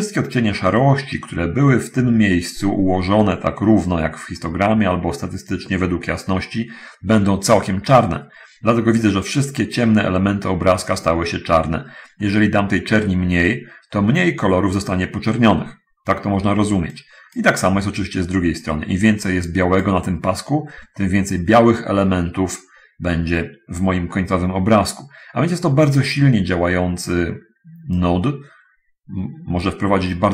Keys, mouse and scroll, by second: 13.8-15.2 drag, 17.0-17.8 drag, 19.4-20.0 drag, 28.2-30.3 drag.